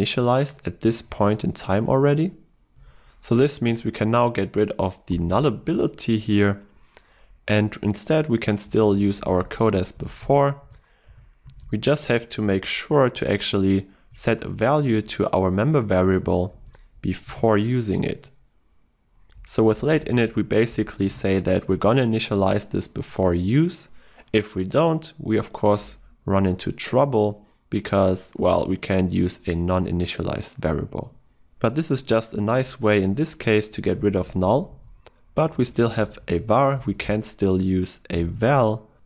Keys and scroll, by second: 14.3 ctrl+w, 38.9 Escape.